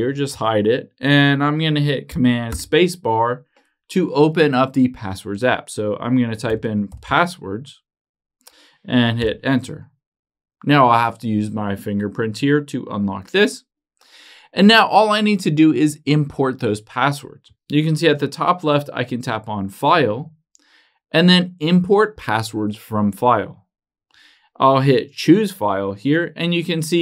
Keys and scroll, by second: 2.7 super+space.